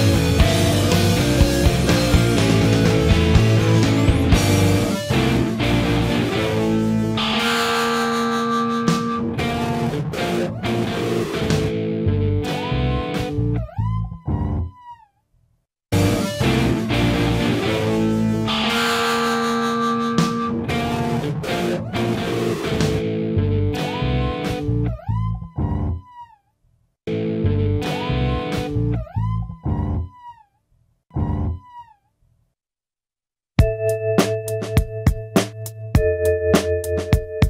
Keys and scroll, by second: 0.0-0.3 alt+scroll, 3.6 alt+g, 3.7-5.6 typing, 14.4-16.1 typing, 23.8 scroll.